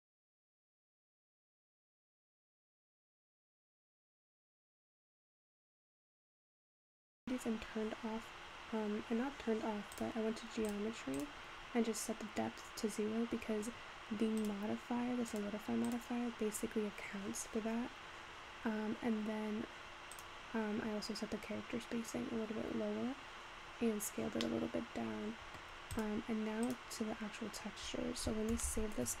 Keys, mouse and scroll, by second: 0.4 click, 4.5-5.5 scroll up 5, 5.5 click, 6.2-6.6 scroll down 3, 10.0-11.8 drag, 11.8-14.5 scroll down 3, 14.5 click, 15.3-18.9 drag, 20.1 click, 23.9-24.6 scroll down 3, 24.6-26.1 middle drag, 26.1 click, 26.7 click, 27.4-29.2 scroll down 2.